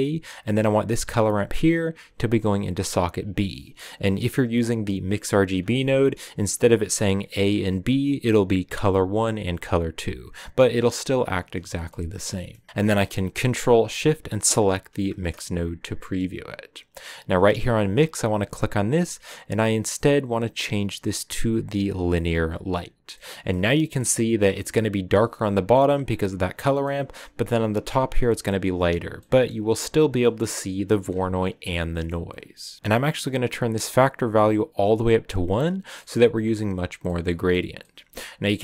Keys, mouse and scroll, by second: 0.4-3.3 drag, 3.9-4.5 scroll up 1, 4.5-14.8 drag, 15.8 click, 23.0 middle click, 23.5-25.4 scroll up 4, 23.6 middle click, 25.4-26.3 scroll up 1, 26.3 click, 26.7-28.6 middle drag, 28.6-29.2 scroll up 1, 29.2-32.8 middle drag, 32.8-37.0 drag, 37.0-38.6 middle drag.